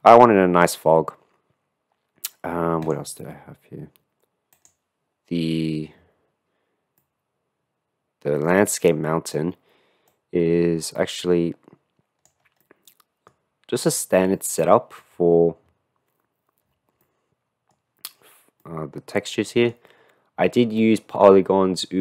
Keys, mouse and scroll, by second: 0.0 ctrl+space, 2.8-3.2 drag, 4.5 click, 7.2-8.5 middle drag, 8.9-9.4 middle drag, 10.2-12.3 drag, 12.3 middle click, 13.4-14.4 middle drag, 14.6 click, 17.1 click, 17.2 middle click, 18.8-19.8 middle drag, 21.0 middle click.